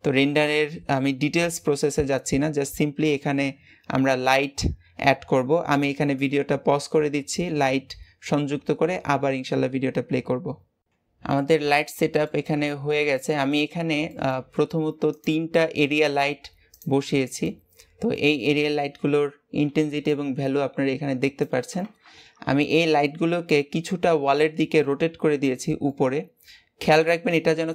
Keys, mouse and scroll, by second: 11.3-13.6 middle drag, 13.6-14.0 scroll up 2, 14.0-15.0 middle drag, 15.0 click, 16.6 click, 17.3-21.9 middle drag, 23.3 KP_3, 24.3-27.3 middle drag, 27.3 g.